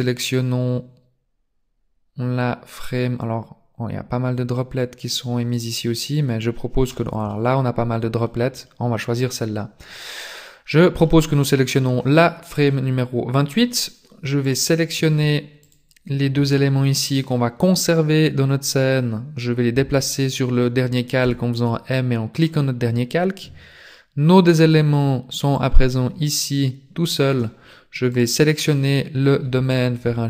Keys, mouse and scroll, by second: 7.4 middle click, 8.5 middle click, 12.7 middle click, 14.7 right click, 15.8 shift+right click, 21.2 m, 24.5 click, 25.6 click, 28.1 right click.